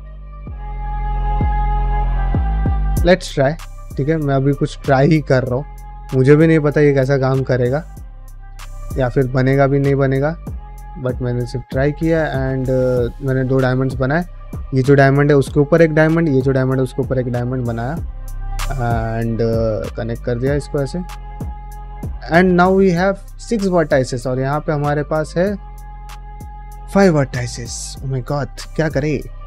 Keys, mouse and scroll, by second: 0.3 shift+middle click, 1.1 middle click, 2.4 click, 3.1 f, 4.8 f, 5.7 click, 6.0 f, 6.6 middle click, 8.1 click, 8.2 f, 9.2 click, 10.4 2, 10.5 click, 11.0 f, 11.0 1, 11.3 click, 12.1 click, 12.3 g, 12.6 click, 12.7 g, 13.3 click, 13.5 g, 17.5 middle click, 18.2 click, 18.6-20.7 typing, 19.5 click, 20.2 click, 20.9 middle click, 21.2 click, 21.9 ctrl+click, 23.6 middle click, 24.5 middle click, 25.2 click, 25.9 ctrl+click, 26.3 middle click, 27.9-28.9 middle drag, 29.3-29.4 middle drag.